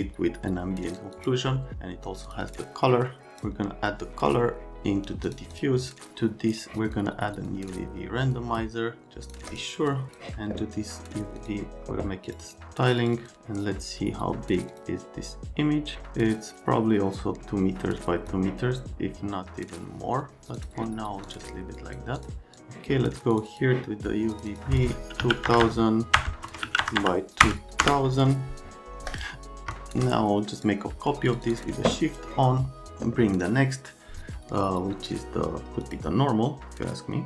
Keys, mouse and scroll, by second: 5.5 click, 6.6 click, 7.5 click, 8.4 click, 9.0 click, 9.5 click, 9.9 click, 11.4 click, 12.3 click, 12.4 click, 13.0 click, 13.2 click, 14.8 click, 15.9 click, 20.6 click, 21.3 click, 21.8 click, 22.2 click, 23.4 click, 23.5 click, 24.3 click, 24.5 click, 25.2-27.4 typing, 26.5 Tab, 27.9 KP_Enter, 29.1 click, 29.8 shift+click, 30.6 click, 31.3 click, 31.5 click.